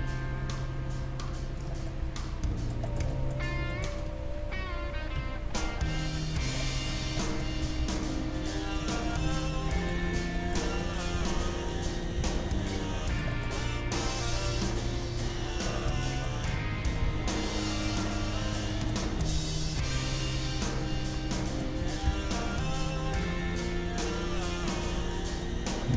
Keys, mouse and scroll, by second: 2.0-5.4 middle drag, 4.0-5.6 right drag, 5.1 g, 7.2-8.9 middle drag, 7.6 g, 9.1-11.3 middle drag, 9.5-11.3 right drag, 11.1 g, 12.0-13.7 right drag, 12.2 g, 14.0 right click, 14.0-17.7 middle drag, 17.0 g, 18.7-20.7 middle drag, 20.1-22.5 right drag, 21.5-23.2 middle drag, 21.8 g, 25.1-25.9 middle drag.